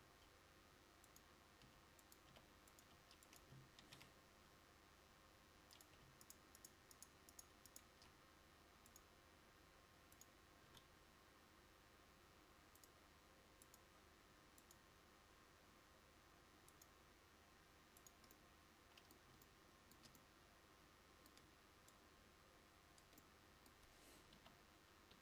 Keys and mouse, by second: 1.7 g, 3.9 shift+d, 7.3-20.5 drag, 24.5 KP_1.